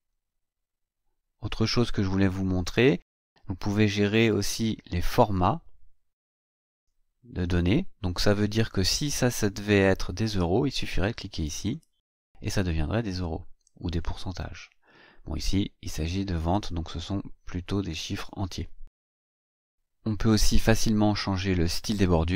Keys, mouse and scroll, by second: 11.6 click, 13.8 click, 15.4 click, 17.7 BackSpace.